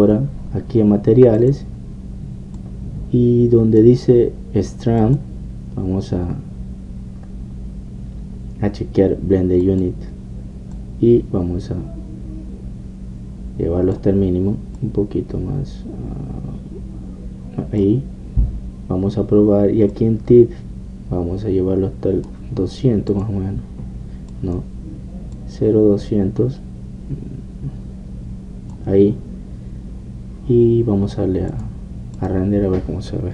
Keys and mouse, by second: 0.0 Escape, 0.9 click, 1.5 middle click, 2.4-5.4 drag, 5.4 middle click, 6.1-8.7 drag, 10.7-13.7 drag, 15.8-17.8 drag, 17.8-21.0 middle drag, 21.0-33.3 drag.